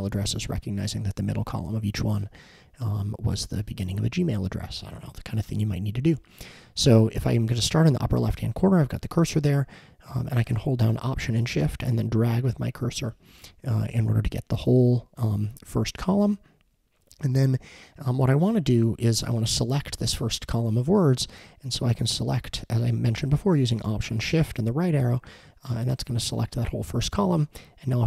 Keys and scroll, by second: 24.6 alt+shift+Right.